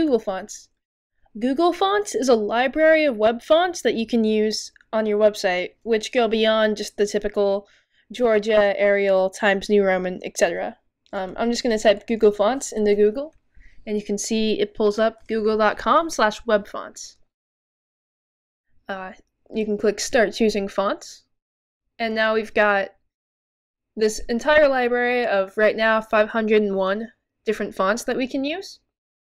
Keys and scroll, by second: 0.0-0.9 typing, 11.2-12.3 typing, 14.1 typing.